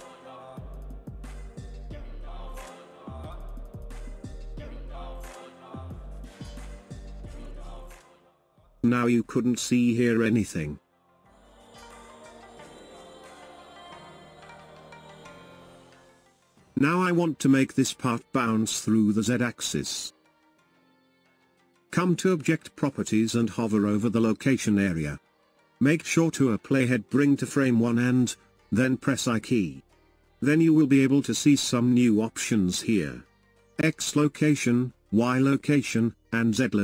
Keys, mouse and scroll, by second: 4.8-7.5 drag, 8.4 click, 9.1 click, 11.9-14.9 shift+middle drag, 33.7 click.